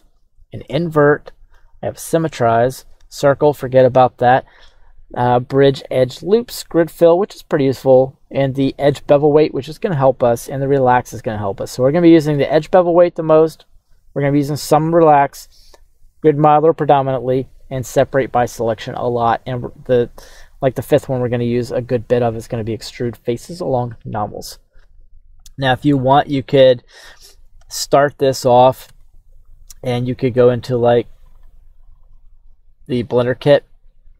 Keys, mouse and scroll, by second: 25.8 middle click, 26.4-28.9 scroll down 2, 28.9-29.6 scroll down 1, 29.6 Tab, 31.3 click, 32.0 click, 33.0 click.